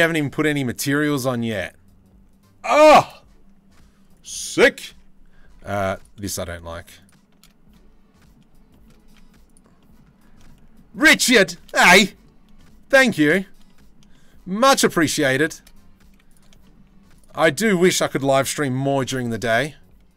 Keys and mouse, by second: 4.5 Tab, 5.1 2, 8.6 z, 12.2 shift+middle click, 13.3-14.5 middle drag, 15.7 z, 17.1 z, 18.5 ctrl+b.